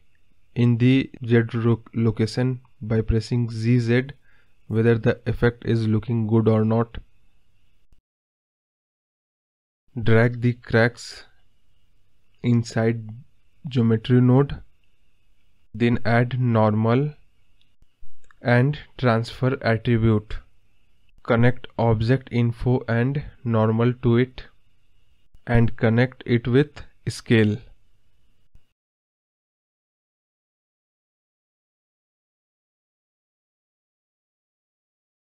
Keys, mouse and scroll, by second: 0.5 g, 3.6 ctrl+z, 4.6-6.0 drag, 6.7 scroll up 3, 6.9-7.8 middle drag, 7.8 click, 13.5 click, 24.7 click, 26.9-30.9 drag, 30.9 scroll up 1, 31.0-32.2 middle drag, 32.2 click, 32.5 click, 34.2 g.